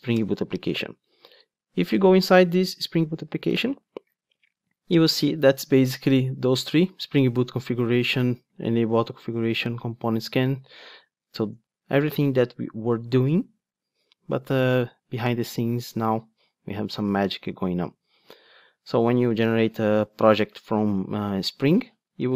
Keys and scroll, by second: 0.2 Return, 3.5 super+b.